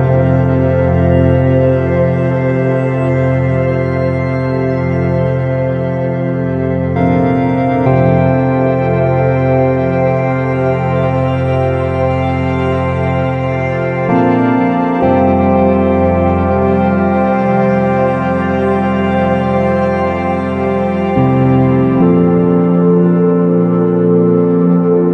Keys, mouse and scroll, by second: 5.6 shift+z, 7.1 middle click, 12.3 shift+z.